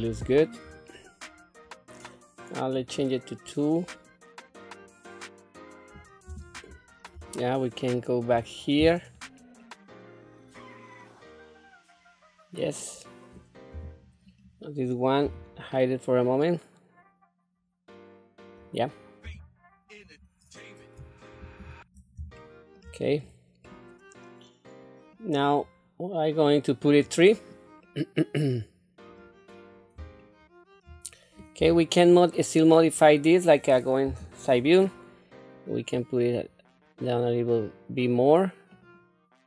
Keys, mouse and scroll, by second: 0.9 scroll down 2, 2.7 click, 3.9-5.9 middle drag, 6.2 Tab, 6.7-7.0 scroll up 2, 7.3 shift+middle click, 9.2 scroll down 1, 9.6-12.7 middle drag, 13.7 Tab, 14.3 click, 15.2 h, 15.8-18.7 middle drag, 19.2 Tab, 21.4 alt+h, 22.4 shift+middle click, 23.0 click, 23.6-25.1 middle drag, 27.0 click, 27.8-29.1 middle drag, 29.7 scroll down 1, 30.2 shift+middle click, 31.0-31.4 scroll up 1, 31.6 Tab, 32.3-33.5 middle drag, 34.0 KP_3, 34.5 scroll up 2, 35.9-39.4 drag.